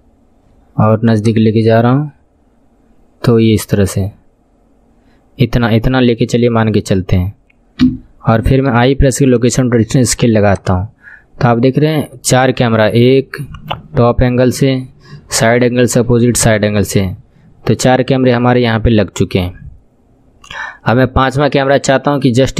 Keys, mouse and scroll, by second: 1.2 click, 7.8 n, 8.7 i, 10.5-22.5 drag.